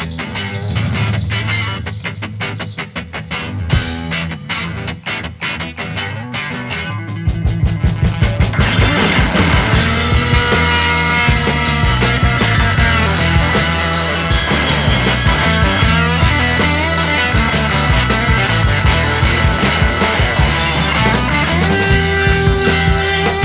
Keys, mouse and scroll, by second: 1.3-3.1 drag, 4.5 click, 6.1 click, 7.5-8.7 drag, 8.9-9.5 scroll down 5, 9.5 click, 10.9-13.8 drag, 15.3 click, 16.5 click, 17.0-18.6 drag, 19.1 click, 20.4 click, 21.7 click, 22.8-23.4 drag.